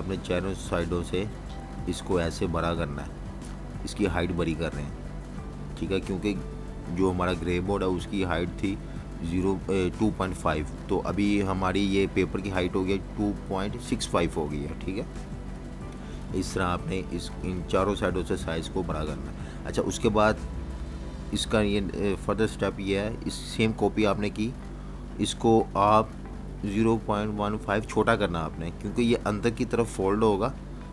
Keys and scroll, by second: 2.8-4.1 typing, 9.4-10.7 typing, 10.8 Return, 13.7 super+-, 15.4 z, 15.5 z, 16.9 v, 27.4-29.2 typing, 29.6 Return.